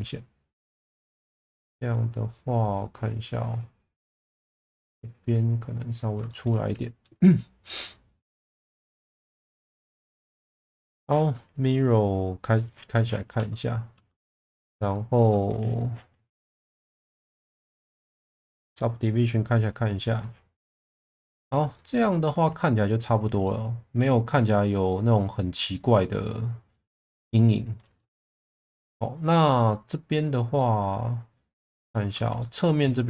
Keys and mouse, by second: 0.3 click, 1.5-4.0 middle drag, 5.3 click, 6.3 shift+middle drag, 6.6 alt+middle click, 8.6 Tab, 9.7-10.6 middle drag, 12.6 click, 13.4 Tab, 14.0 Tab, 17.2 click, 17.9 shift+middle click, 19.7 click, 21.2 shift+middle click, 21.7-22.3 middle drag, 22.6-23.0 middle drag, 23.4-24.0 middle drag, 24.3-24.6 middle drag, 24.9-26.7 middle drag, 27.0 alt+middle click, 28.1 shift+middle drag, 28.8-29.9 middle drag, 30.5-32.0 middle drag, 32.4 shift+middle drag.